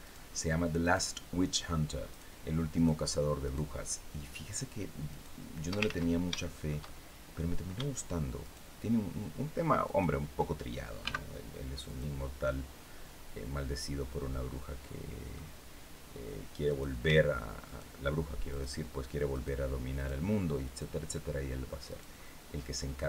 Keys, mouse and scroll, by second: 0.5 shift+right click, 1.8 shift+right click, 2.4 shift+right click, 3.1 shift+right click, 4.2 shift+right click, 4.8 shift+right click, 5.5 ctrl+shift+z, 6.1 ctrl+shift+middle click, 6.7 shift+scroll up 2, 8.1 shift+right click, 9.5 shift+right click, 10.7 x, 11.5 click, 12.0-15.2 middle drag, 16.3 right click, 17.3 shift+right click, 18.1 shift+right click, 19.0 shift+right click, 19.6 shift+right click, 20.3 shift+right click, 21.6 shift+right click, 21.9 shift+middle click.